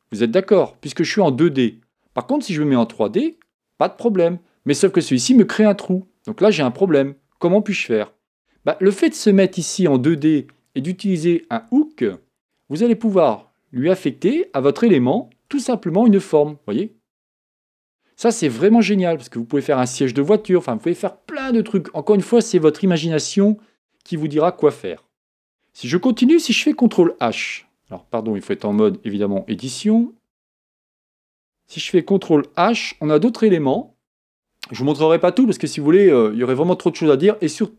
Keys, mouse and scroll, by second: 3.3 click, 4.0-7.0 middle drag, 8.5 KP_1, 10.2 click, 12.1 Tab, 12.4 click, 14.2 g, 17.7-20.7 middle drag, 26.8 ctrl+h, 28.6 click, 29.4 Tab, 30.4-32.7 middle drag, 32.7 ctrl+h.